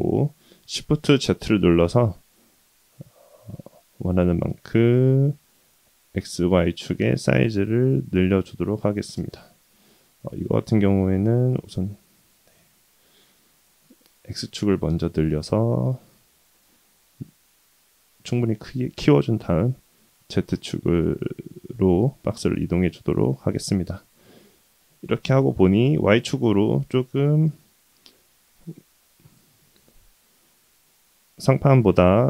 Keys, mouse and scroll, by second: 6.9-8.1 middle drag, 9.1 ctrl+z, 9.5-10.3 middle drag, 10.6-12.0 middle drag, 12.5 KP_1, 13.4 s, 17.9 g, 22.2-24.4 middle drag, 24.9 scroll down 1, 25.0-26.3 scroll up 1, 26.3-26.8 middle drag, 27.5 KP_3, 28.4 click, 28.9-29.5 scroll up 2, 29.6-30.0 shift+middle drag, 31.0-31.9 drag.